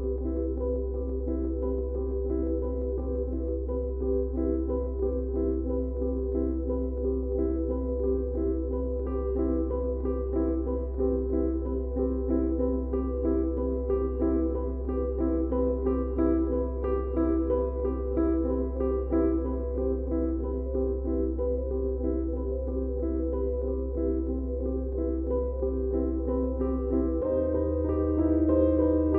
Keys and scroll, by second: 8.8 4, 11.7 3, 23.9 4, 25.3 shift+i, 26.0 3, 26.7 Delete.